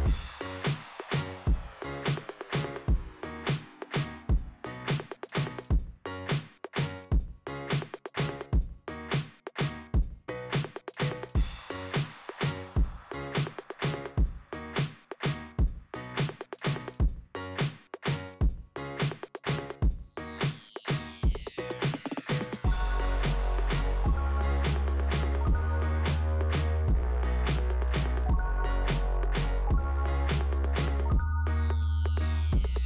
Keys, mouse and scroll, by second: 2.0-2.4 scroll down 1, 3.9 middle click, 19.6 middle click, 21.0 click, 21.1 click, 23.4 click, 31.5 click.